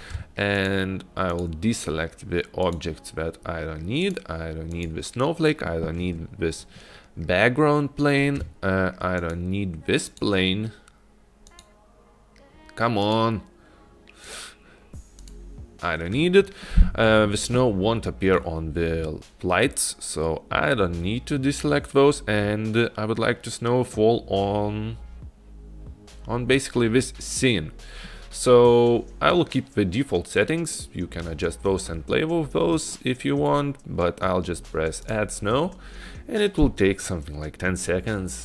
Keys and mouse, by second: 0.7 shift+click, 1.4 shift+click, 2.7 shift+click, 4.1-4.4 shift+drag, 4.8 shift+click, 9.3 shift+click, 10.2 shift+click, 11.5 shift+click, 13.1 shift+click, 14.3 shift+click, 15.3 shift+click, 35.1-38.4 drag.